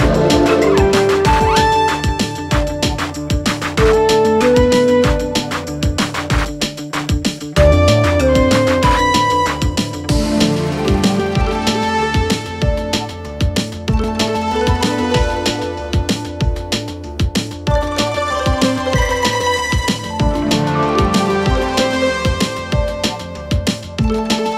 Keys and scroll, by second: 16.8 Escape.